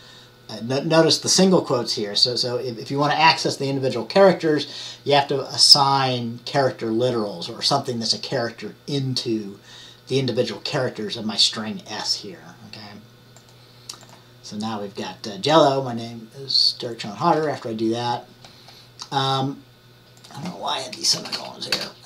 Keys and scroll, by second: 21.4 BackSpace, 21.8 BackSpace.